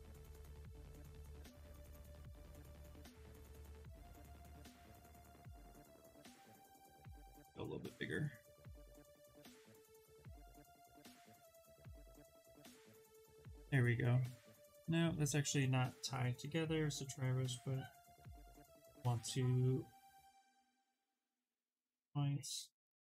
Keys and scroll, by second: 7.0 ], 10.1 ctrl+z, 14.4 ctrl+z, 20.5 ctrl+z.